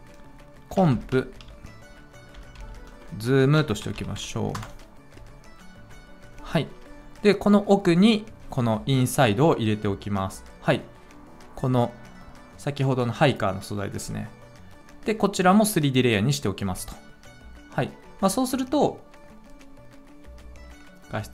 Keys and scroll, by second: 0.5-4.6 typing.